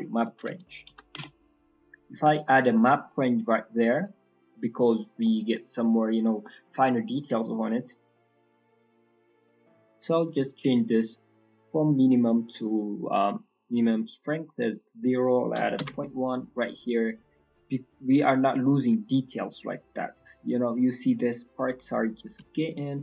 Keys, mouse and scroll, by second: 0.4 Down, 3.0-3.4 scroll up 4, 4.3 scroll down 2, 4.5 middle click, 4.8-5.2 scroll up 3, 5.2 middle click, 5.5-6.6 scroll down 5, 8.8 middle click, 9.3-10.1 scroll up 3, 10.1 middle click, 10.3-10.9 scroll up 3, 10.9 click, 14.7 click, 17.0-17.8 scroll up 5, 17.4 middle click, 18.0 middle click, 18.3-18.8 scroll up 3, 21.9 click.